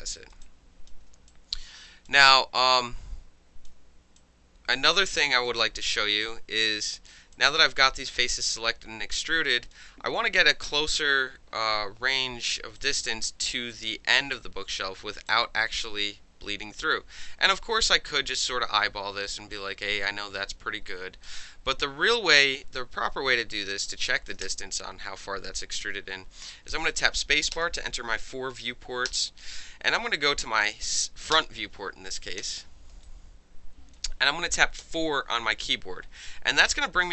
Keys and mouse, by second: 0.2 alt+right drag, 0.3 alt+middle click, 0.4-0.9 alt+drag, 0.9-1.3 alt+middle drag, 1.3-2.1 alt+drag, 2.6-3.7 alt+drag, 4.2-5.0 alt+drag, 5.0 alt+middle drag, 5.3 alt+right drag, 5.5 alt+middle click, 5.6-6.3 alt+drag, 6.3-7.3 alt+middle drag, 7.3-7.8 alt+drag, 7.8-8.1 alt+middle drag, 8.1-9.7 alt+drag, 9.7-10.5 alt+middle drag, 10.5-12.2 alt+drag, 12.2 alt+middle click, 12.8 alt+click, 13.0-13.9 alt+middle drag, 13.9 alt+click, 14.2-15.3 alt+middle drag, 15.3-19.2 drag, 19.2-19.5 alt+middle drag, 19.5-21.2 alt+drag, 21.2-21.8 alt+middle drag, 21.8-24.3 alt+drag, 24.4 space, 27.5 space, 29.1 space, 31.3 space, 32.4 f, 33.0-33.9 alt+drag, 34.8 4.